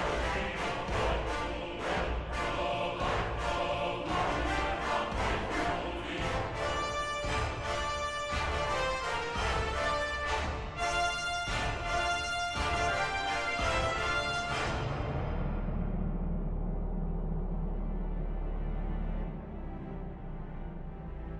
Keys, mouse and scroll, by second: 3.9 ctrl++, 8.3 ctrl+-, 8.7 ctrl++, 8.8 ctrl+-.